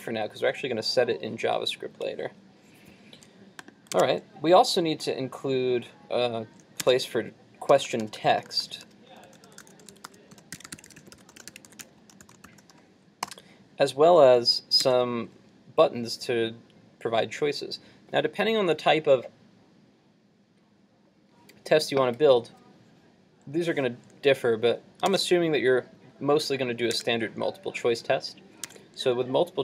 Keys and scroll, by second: 4.0 super+Tab, 6.2 super+Tab, 14.9 super+Tab, 25.1 super+Tab, 28.7 super+Tab.